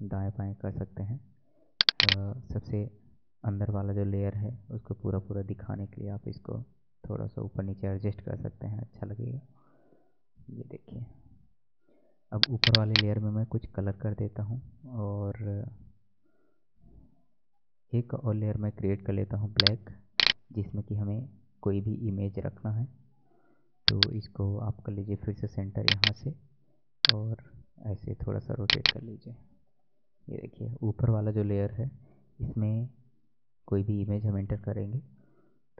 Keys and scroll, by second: 3.1 Right, 7.9 Up, 9.3 Left, 10.7 Up, 17.2 ctrl+j, 17.7 ctrl+u, 35.0 ctrl+u.